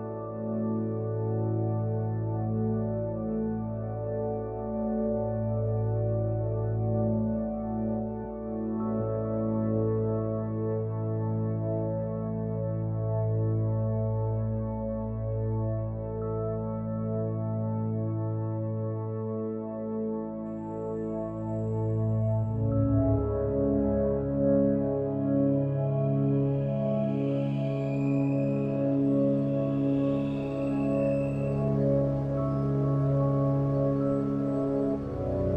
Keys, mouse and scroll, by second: 1.1 middle click, 2.1-2.7 middle drag, 13.3-13.9 middle drag, 21.7-24.0 middle drag.